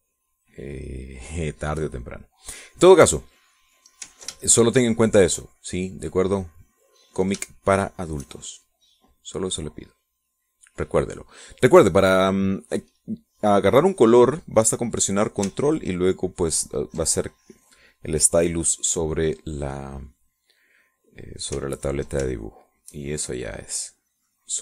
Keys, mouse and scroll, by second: 2.6 click, 4.1 middle click, 5.3-6.3 ctrl+shift+drag, 6.5-8.1 shift+drag, 8.3 shift+click, 9.4-11.9 shift+drag, 12.2-13.4 middle drag, 19.4 click, 22.7 ctrl+click, 23.2 ctrl+shift+click, 23.9-24.6 shift+drag.